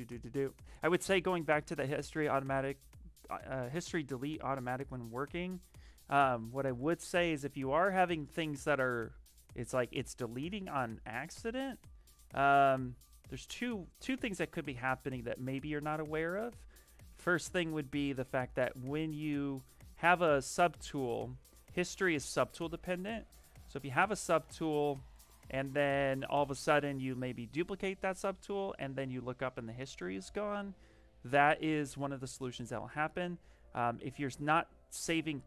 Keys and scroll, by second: 8.4 s.